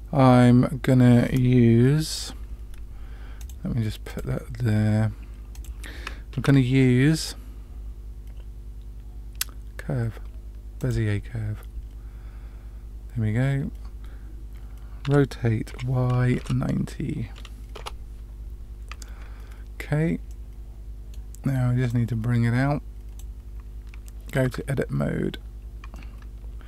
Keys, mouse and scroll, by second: 3.3 click, 4.0 click, 5.5 click, 6.3 shift+a, 15.0 r, 20.3-21.2 middle drag, 21.8-23.2 drag, 24.9 Tab, 25.9-26.6 middle drag.